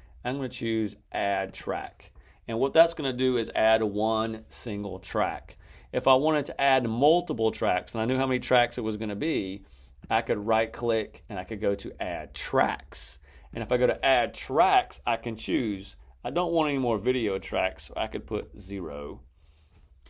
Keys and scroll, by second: 18.2 0.